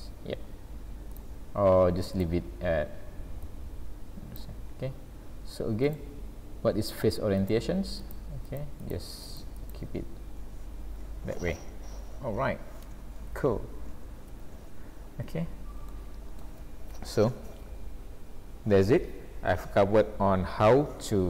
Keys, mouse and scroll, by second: 0.4-0.8 scroll down 2, 0.8 scroll up 2, 1.1 click, 2.2 click, 5.9 click, 8.9 click, 10.1 click, 11.6-12.0 scroll down 3, 13.3 a, 14.3 alt+a, 15.1-15.5 scroll up 2, 15.9 shift+middle click.